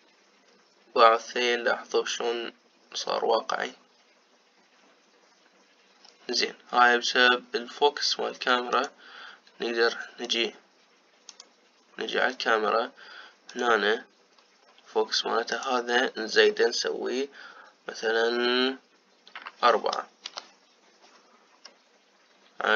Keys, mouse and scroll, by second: 9.4 click, 10.9 click, 12.0 click, 14.2 click, 16.2-19.3 drag.